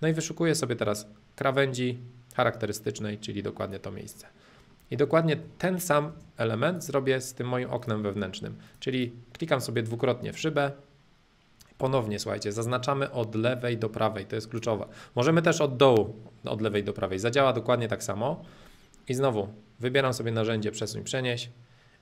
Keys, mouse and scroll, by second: 0.0-2.0 middle drag, 3.6 click, 4.0-6.0 middle drag, 6.0 space, 6.6-8.6 drag, 8.8-9.8 drag, 9.8-11.9 middle drag, 12.6-14.6 drag, 15.6-17.6 drag, 18.4-20.0 middle drag, 20.0 m, 21.2-22.0 drag.